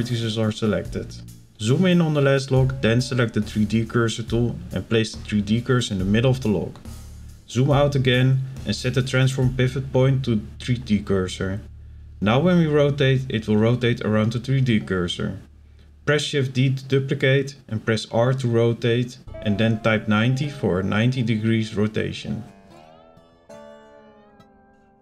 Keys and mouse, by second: 1.5 click, 4.8 click, 5.8 shift+middle click, 9.3-11.1 drag, 12.2 shift+d, 13.2 r, 19.5 shift+middle click, 23.2 click, 23.4 click.